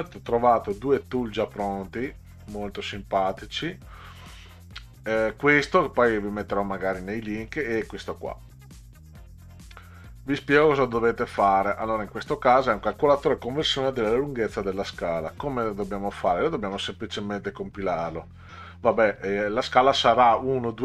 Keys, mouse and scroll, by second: 1.5 click, 2.8 click, 3.9 click, 6.5 click, 10.0 click, 10.8 click, 17.9 click.